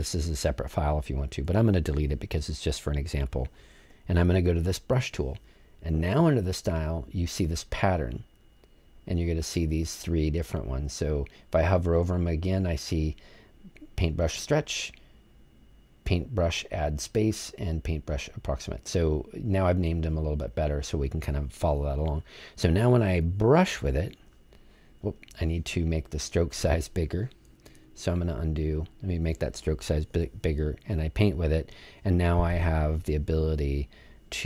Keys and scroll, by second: 1.4 BackSpace, 4.4 BackSpace, 27.6 super+z, 29.1 super+z.